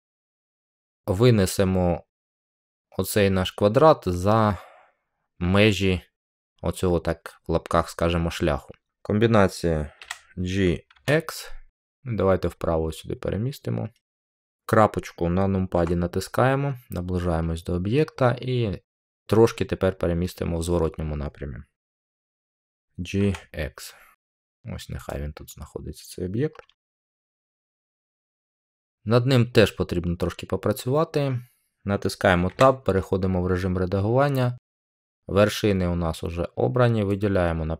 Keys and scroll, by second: 9.9-10.8 typing, 22.3-23.1 typing, 32.4 Tab.